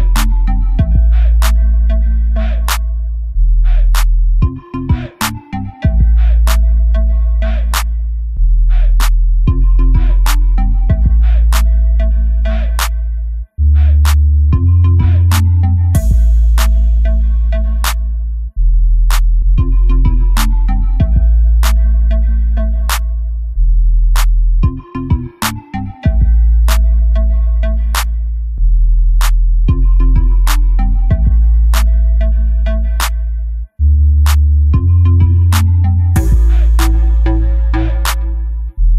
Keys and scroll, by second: 3.5 b, 4.0 x, 31.4 Delete, 37.8 ctrl+z.